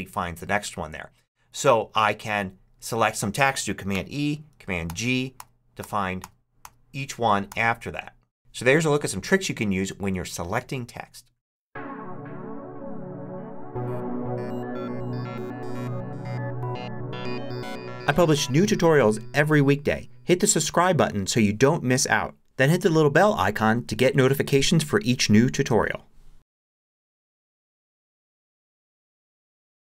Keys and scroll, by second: 3.8 super+e.